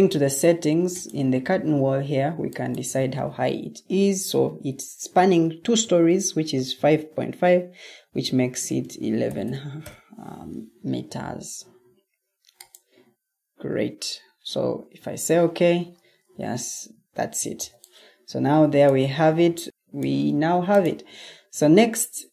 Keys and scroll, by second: 8.3-10.2 typing, 16.6 Escape, 17.5 o.